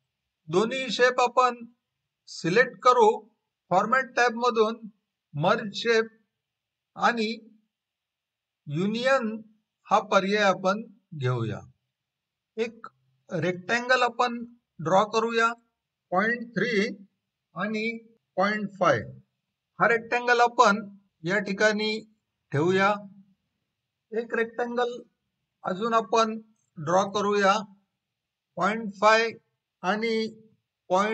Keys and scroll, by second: 17.2-17.9 typing, 19.2-20.0 typing, 28.5-29.3 typing, 30.4-31.1 typing.